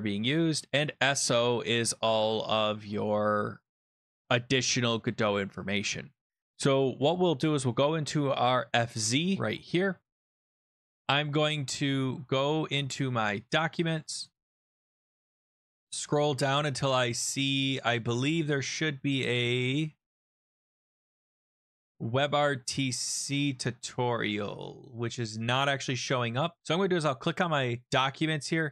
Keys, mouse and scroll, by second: 0.8 click, 8.0 click, 9.5 click, 10.4 click, 12.5-13.4 scroll up 3, 13.4 click, 14.1 click, 14.2 click, 14.5 scroll up 1, 14.6 scroll, 14.9 click, 15.0 click, 15.1-15.8 scroll, 17.1-17.4 scroll, 18.4-19.2 scroll, 19.5-20.4 scroll, 20.5-21.0 scroll, 21.3 click, 23.2-26.1 scroll, 26.6 click, 27.2-27.5 scroll.